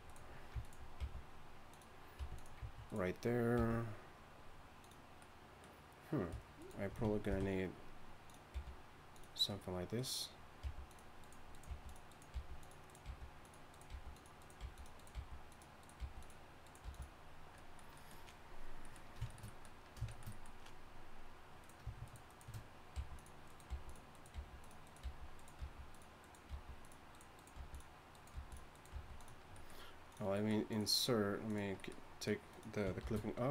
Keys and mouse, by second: 1.0 g, 2.2 r, 3.6 g, 6.6 click, 7.3 ctrl+b, 8.5 g, 10.6 g, 11.7-16.8 typing, 22.9 g, 23.7 g, 24.3 g, 25.6 g, 26.5 g, 27.5 g, 28.3 g, 28.6 g, 33.0 shift+a.